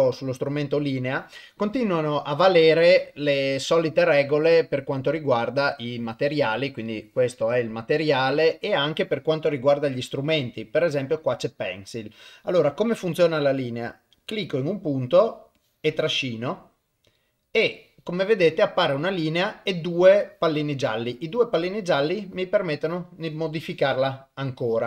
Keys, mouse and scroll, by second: 0.1 click, 5.7 click, 14.5 click, 15.5-24.8 drag.